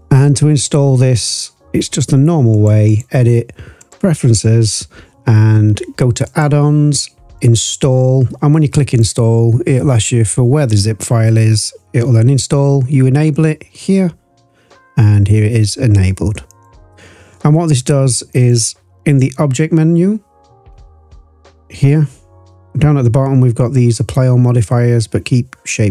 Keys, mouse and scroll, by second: 1.1 click, 2.5 click, 2.8-3.9 drag, 18.3-21.5 drag.